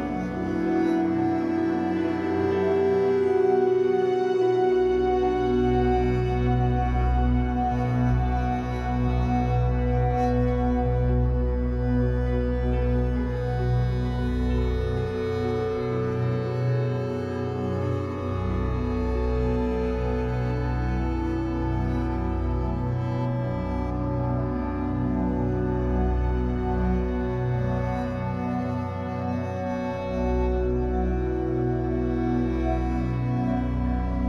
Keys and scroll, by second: 0.8 F8, 17.4 alt+c, 19.4 b, 22.4 Escape, 22.6 3, 30.7 Escape, 33.2 3.